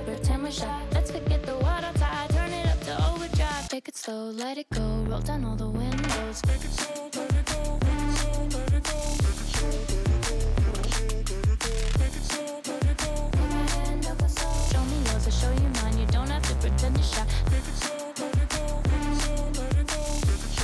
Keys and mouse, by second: 0.2 shift+click, 0.8 e, 2.7 Tab, 3.4 shift+click, 4.2 shift+click, 5.8 ctrl+a, 6.7 shift+drag, 7.0 click, 7.4 g, 8.3 z, 8.4 z, 9.1 Delete, 10.3 g, 13.6 z, 14.2 r, 15.2 z, 15.6 right click, 17.1 r.